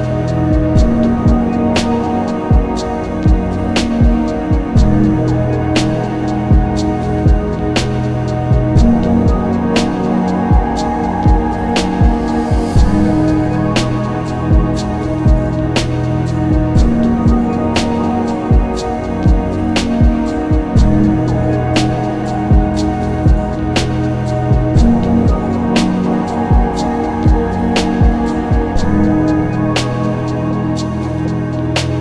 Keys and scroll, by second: 2.4 ctrl+z, 9.9 alt+b, 10.1 alt+d, 10.4 s, 12.2 ctrl+z, 16.8 ctrl+z, 17.1 s, 18.1 s, 20.1 ctrl+z, 21.2 ctrl+z, 22.1 ctrl+z, 24.3 ctrl+z, 27.5 ctrl+z.